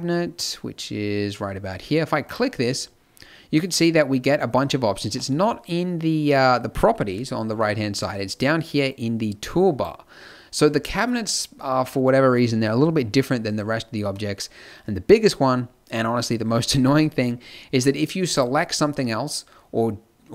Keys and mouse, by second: 2.2 click, 13.8-18.3 middle drag.